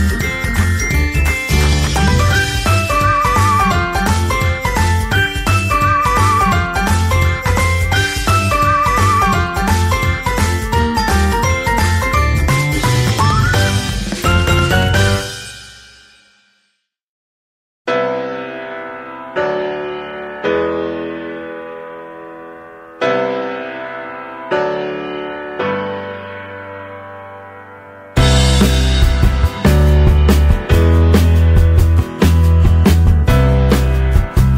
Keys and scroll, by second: 8.1 ctrl+z, 29.7 ctrl+t.